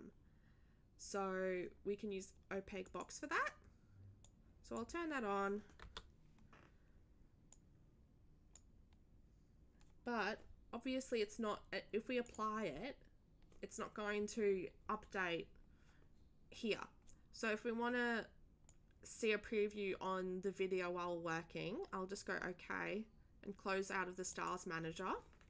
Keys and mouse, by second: 2.8 click, 4.2-4.7 drag, 7.5 click, 12.2 click, 18.6 click, 24.3 click.